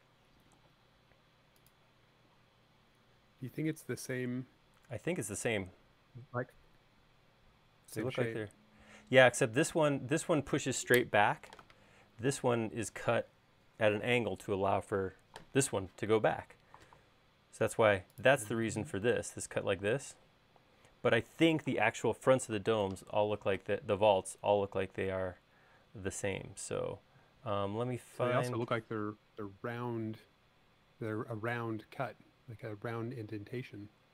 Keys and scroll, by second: 23.7 super+Tab.